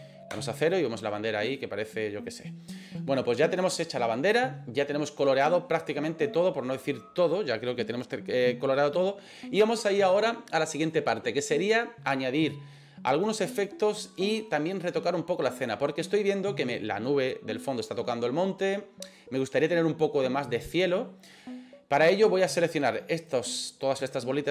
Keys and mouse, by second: 0.3 KP_0, 1.5 right click, 23.2 right click.